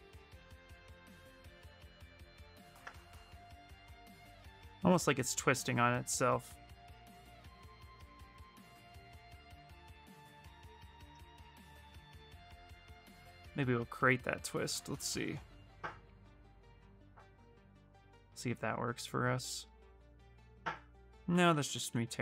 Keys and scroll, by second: 10.0 w, 21.1 ctrl+z, 21.3 ctrl+z, 21.6 ctrl+z, 21.7 ctrl+z.